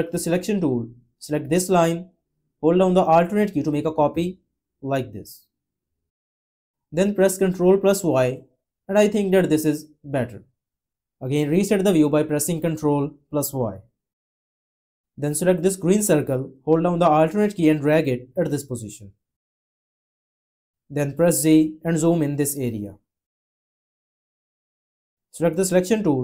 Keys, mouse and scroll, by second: 3.2 alt+click, 7.8 ctrl+y, 12.8 ctrl+y, 17.0 alt+click, 21.2 z.